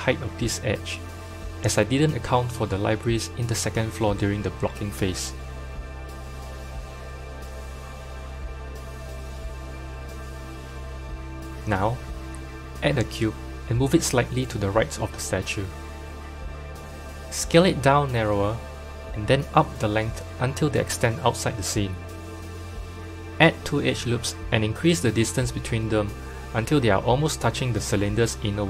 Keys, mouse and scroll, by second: 0.7 alt+click, 1.4 alt+shift+click, 2.0 alt+shift+click, 3.0 g, 6.5 Tab, 7.5 click, 11.8 click, 12.4 shift+a, 13.7 shift+a, 14.6 KP_7, 14.7 KP_7, 15.5-16.3 shift+middle drag, 16.3 g, 18.1 Tab, 18.5 click, 19.4 s, 21.1 s, 24.6 ctrl+r.